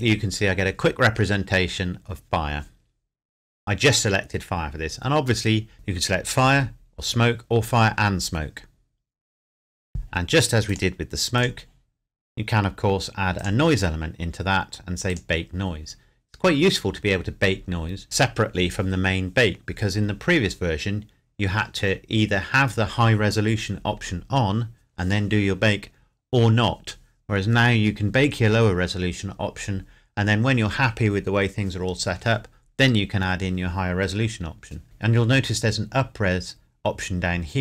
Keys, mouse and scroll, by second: 10.6 click, 12.1-13.4 scroll down 1, 13.4 click.